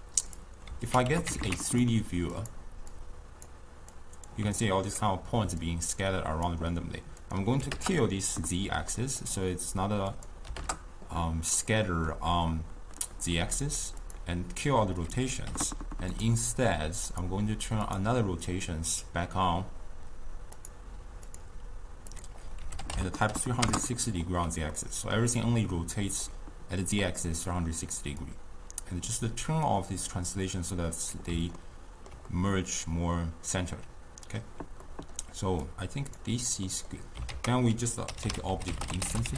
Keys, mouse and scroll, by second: 3.9 click, 4.7-5.8 ctrl+middle drag, 5.8-8.9 drag, 8.9-10.7 middle drag, 10.7-11.7 drag, 11.7-16.2 middle drag, 16.2 u, 23.7-24.8 drag, 24.8-28.5 middle drag, 28.5-31.7 drag, 31.7-39.3 ctrl+middle drag.